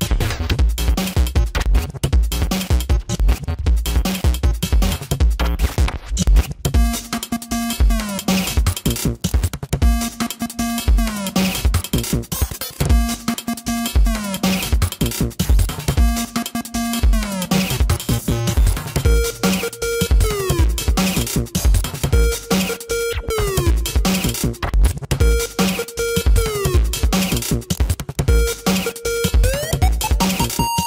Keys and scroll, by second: 2.4 ctrl+=, 2.8 space, 3.3 space, 6.5 space, 8.8 space, 9.4 ctrl+alt+z, 10.6 space, 11.6 space, 13.3 ctrl+alt+z, 13.7-17.6 typing, 18.3 ctrl+alt+z, 19.7 space, 21.3 space, 21.7 space, 22.3 space, 23.6 space, 24.7 space, 26.3 ctrl+alt+z, 27.2 ctrl+alt+z, 28.0 ctrl+=, 28.2 ctrl+alt+z, 28.9 ctrl+=, 29.2 space.